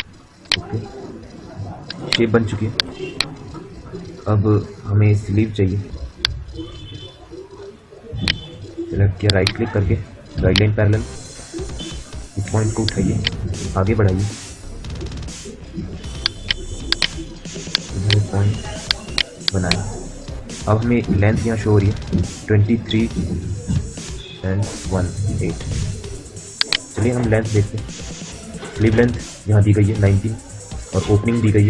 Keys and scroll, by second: 12.2 q.